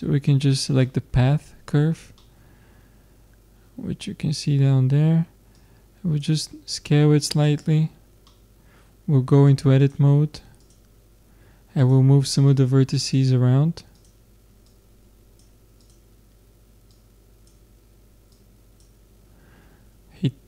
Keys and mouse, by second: 0.8-6.0 middle drag, 6.0-7.7 drag, 7.7 middle click, 9.5 middle click, 10.5 click, 11.6 middle click, 12.5-20.0 drag.